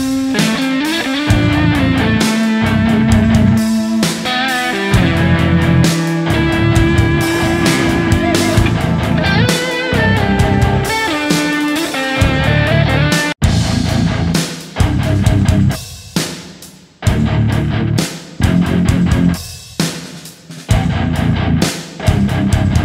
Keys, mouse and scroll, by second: 10.8 right click, 12.7 typing, 15.0 shift+click, 15.7 shift+click, 16.4 alt+right click, 18.7 alt+right click, 20.9 typing, 21.5 shift+click.